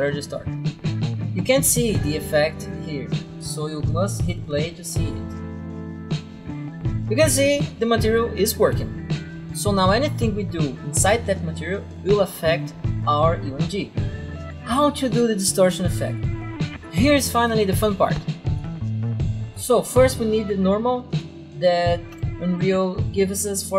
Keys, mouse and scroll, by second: 0.0 click, 4.0 click, 12.2 click, 14.5 click, 16.6 right click, 17.6 click, 18.1 click, 18.6 right click, 18.9 scroll down 2, 19.5 right click, 21.0 right click, 22.0 t, 22.2 click, 23.0 right click.